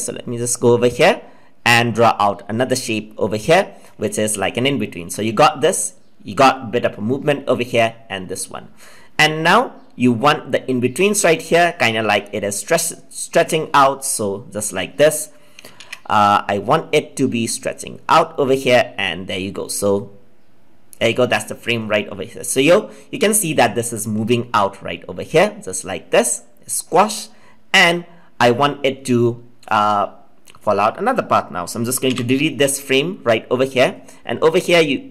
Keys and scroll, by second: 15.7 ctrl+z.